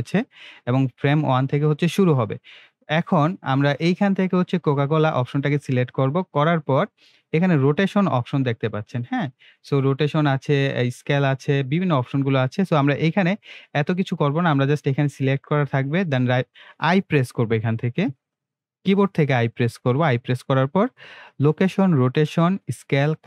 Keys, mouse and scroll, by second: 4.7 click, 7.0 BackSpace, 15.2 click, 18.1 i.